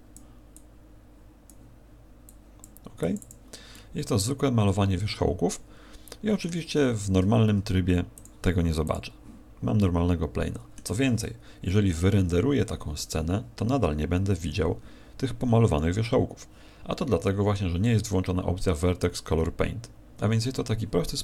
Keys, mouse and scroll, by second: 0.5 click, 2.2 click, 3.0 click, 3.2 click, 3.7 middle click, 9.8 middle click.